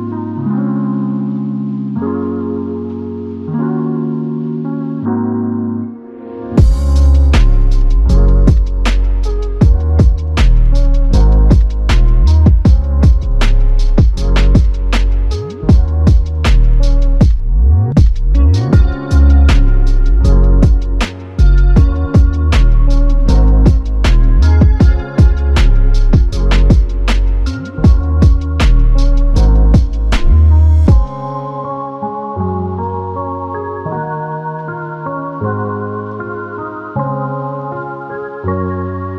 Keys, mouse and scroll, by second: 1.5 double click, 3.8 shift+click, 7.7 double click, 8.7 shift+click, 10.3 shift+click, 11.5 alt+click, 14.5 shift+click, 16.5 shift+click, 18.3 alt+click.